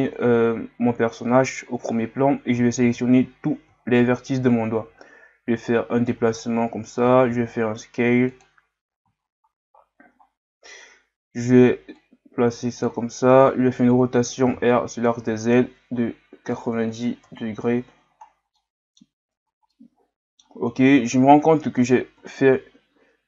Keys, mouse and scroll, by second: 0.1-0.6 scroll down 3, 2.5 a, 3.8-4.2 scroll down 2, 4.9 g, 6.3-6.8 scroll up 1, 7.3 s, 8.9-10.3 scroll up 4, 10.3-12.0 scroll down 1, 12.0-14.5 drag, 14.5 r, 18.2 scroll down 1, 18.6 middle click, 19.2 scroll up 1, 19.7-21.0 middle drag, 21.0 KP_3.